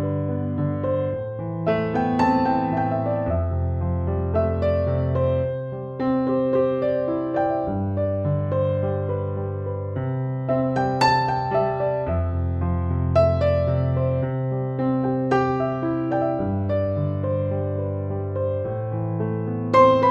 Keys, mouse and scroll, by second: 0.6 click, 10.1 d, 11.4 space, 11.7 click, 11.9-12.2 space, 12.5 ctrl+=, 13.2 click, 13.5 e, 14.3-15.5 [, 15.6-16.2 click, 16.5 ctrl+=, 16.9 space, 17.0-17.7 click, 17.9 ctrl+=, 19.5 space.